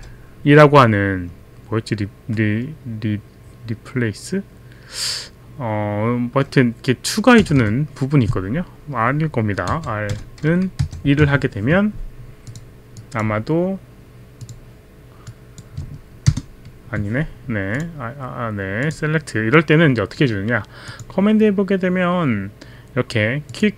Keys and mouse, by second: 7.4 BackSpace, 7.6 BackSpace, 8.3 BackSpace, 9.7 r, 12.4 click, 13.4 click, 14.4 click, 15.3 click, 16.2 ctrl+Return, 17.8 click, 18.9 click, 20.9 click, 23.5 click.